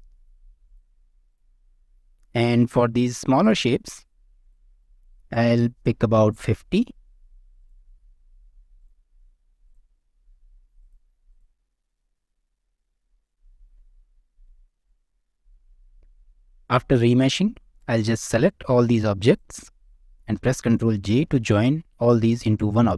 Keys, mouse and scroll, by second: 1.3 click, 1.7-2.0 middle drag, 2.2 shift+middle drag, 2.5 scroll up 1, 2.7 middle drag, 3.4 click, 4.4-7.7 drag, 8.7 click, 9.6-11.0 drag, 11.3 drag, 11.7-13.0 middle drag, 13.5 shift+middle drag, 14.1 middle click, 14.8 click, 17.0-17.5 middle drag, 18.0-18.4 drag, 18.7 middle click, 19.2 ctrl+click, 19.5-20.1 middle drag, 21.0 ctrl+j, 22.5 shift+middle click.